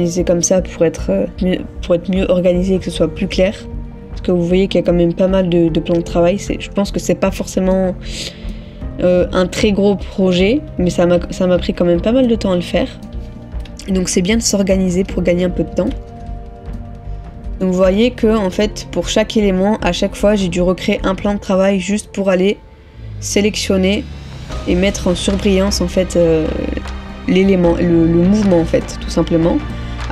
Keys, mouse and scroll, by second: 4.9 middle click, 14.9 middle click, 15.1 ctrl++, 15.8 ctrl++, 16.8 middle click, 18.1 middle click, 18.3 ctrl++, 27.2 middle click.